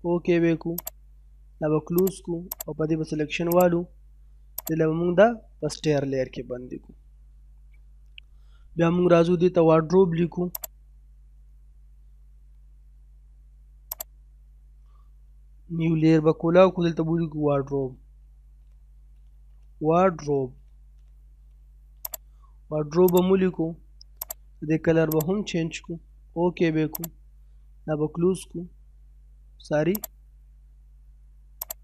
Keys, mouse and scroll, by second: 1.5 scroll up 1, 2.0 click, 5.8 scroll down 1, 6.0 middle click, 7.9-8.2 scroll up 1, 8.2 middle click, 9.4-9.7 scroll up 1, 10.6 click, 14.1 click, 17.0-21.7 typing, 22.0 click, 29.9 click.